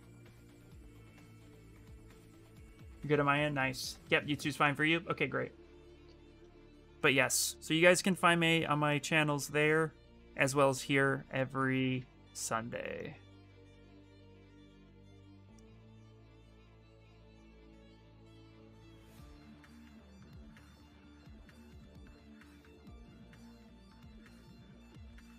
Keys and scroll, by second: 11.7 ctrl+z, 12.0 ctrl+z, 16.5-18.1 typing.